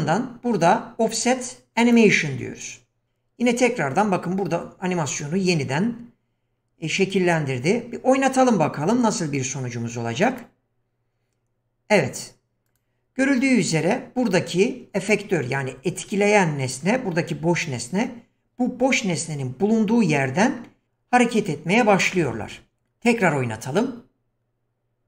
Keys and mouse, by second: 1.9 click, 10.3 click, 12.6 click, 13.4 click.